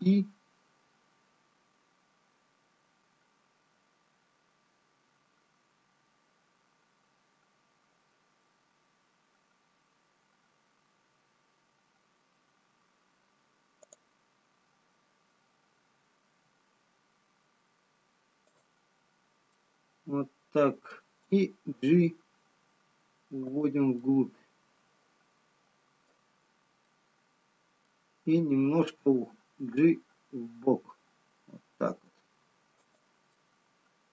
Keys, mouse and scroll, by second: 15.1 scroll up 3, 16.8 i, 20.6 middle click, 20.6-21.0 scroll down 4, 22.6 g, 24.1 middle click, 27.5 middle click, 29.0 g, 33.8 middle click.